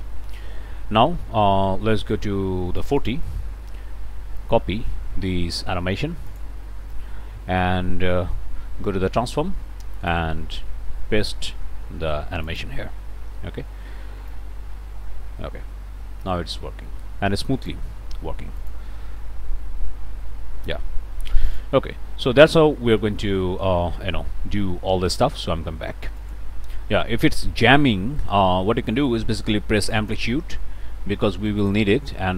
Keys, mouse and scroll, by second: 2.8 click, 4.4 click, 6.3 click, 8.0 middle click, 8.7 middle click, 10.0 click, 12.4-14.2 drag, 14.3-18.9 drag, 21.5-23.2 drag, 26.2 click, 29.9 click, 31.6-32.3 drag.